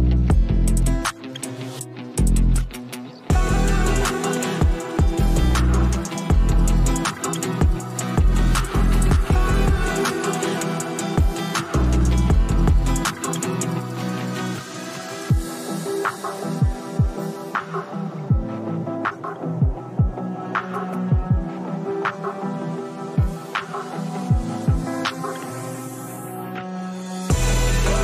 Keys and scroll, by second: 16.8 space, 21.7 space, 22.5 ctrl+space, 22.7 ctrl+KP_Subtract, 23.2 ctrl+KP_Subtract, 27.3 space.